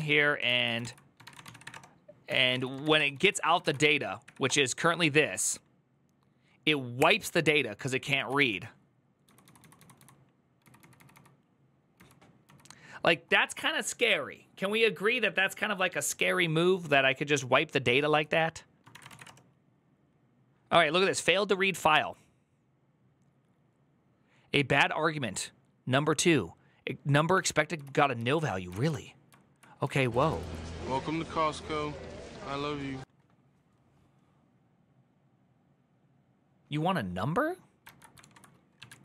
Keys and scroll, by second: 0.0-3.6 typing, 4.0 Up, 4.2 Return, 7.9 ctrl+a, 9.0-11.4 typing, 18.6-19.5 typing, 27.6 ctrl+u, 27.6 q, 27.9 ctrl+u, 28.5 ctrl+u, 29.6-30.2 typing, 31.4 w, 37.6 alt++, 38.0 ctrl+t, 38.3-39.0 typing.